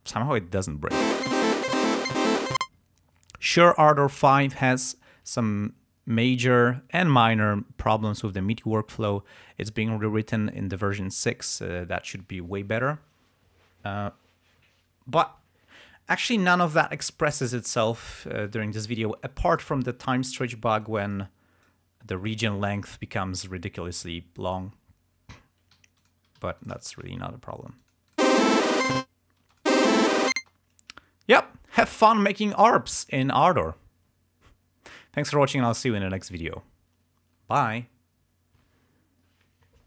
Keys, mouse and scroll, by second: 1.0 space, 2.7 space, 20.5 t, 21.0 click, 23.0-23.6 ctrl+scroll down 2, 24.0 ctrl+scroll up 1, 24.7-25.1 ctrl+scroll up 2, 25.9 ctrl+g, 26.2 ctrl+click, 26.4 ctrl+s, 26.6 ctrl+shift+click, 26.9 ctrl+shift+right click, 27.2 ctrl+shift+scroll down 1, 27.9 click, 28.4 click, 28.4 space, 29.5 space, 29.6 click, 30.1 ctrl+scroll up 2, 30.5 ctrl+space, 31.1 ctrl+scroll down 2.